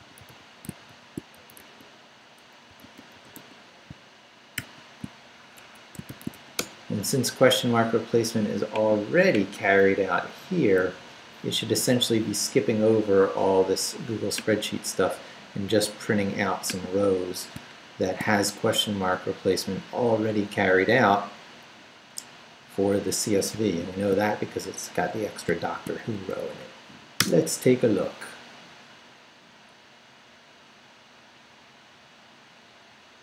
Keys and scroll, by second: 0.0-4.5 typing, 5.6 shift+Escape, 5.8-6.8 typing, 10.0 Right, 10.4 Down, 10.8 Left, 25.6 shift+;, 26.1 shift+Up, 27.2 Return.